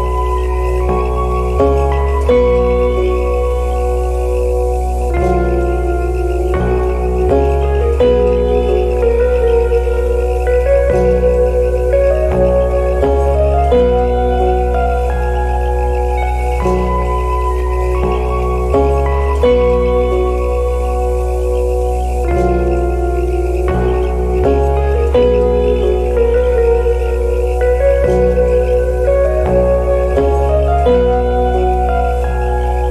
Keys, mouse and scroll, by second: 1.3 right click, 4.1 right click, 7.4 right click, 10.3 right click, 11.3 scroll up 1, 11.9 alt+middle click, 12.0 alt+middle click, 12.3 alt+click, 12.3 alt+middle click, 13.3 alt+scroll up 1, 17.1 right click, 18.7 alt+click, 18.7 alt+middle click, 20.3 right click, 22.6 right click, 24.9 alt+click, 25.8 right click, 27.7-28.2 scroll down 1, 29.0 scroll up 1.